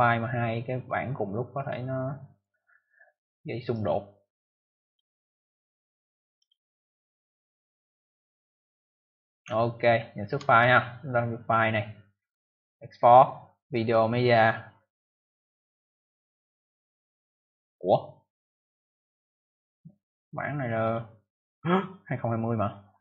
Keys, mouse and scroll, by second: 1.5 click, 2.2 click, 3.6 click, 4.4 click, 5.2 click, 5.3 click, 6.1 click, 6.3 click, 9.4 ctrl+alt+scroll down 1, 10.1 ctrl+scroll up 1, 11.3 click, 15.1 click, 18.1 click, 19.9 click, 20.7 click, 20.8 click, 21.5 click, 21.6 click.